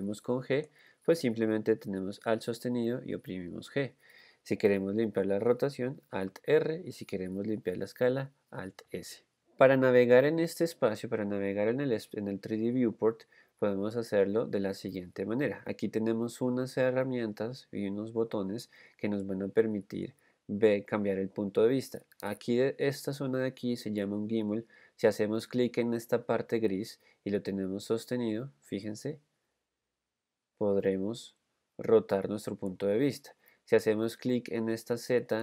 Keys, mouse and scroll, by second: 3.3 alt+g, 6.5 alt+r, 9.2 alt+s.